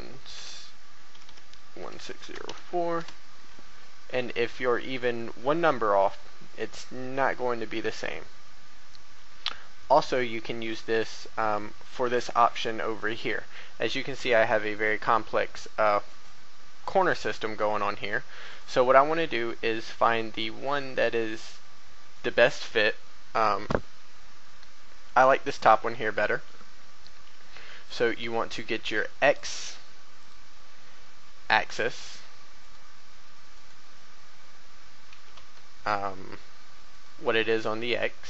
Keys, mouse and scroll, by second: 0.0-2.4 typing, 3.9 a, 4.6 a, 5.2 scroll down 1, 5.9 shift+middle click, 8.1 shift+middle click, 9.8 shift+middle click, 10.8-11.2 scroll up 1, 12.2 shift+middle click, 18.4 right click, 29.3 click, 32.6 right click, 35.0 g, 35.3 x, 36.9 right click.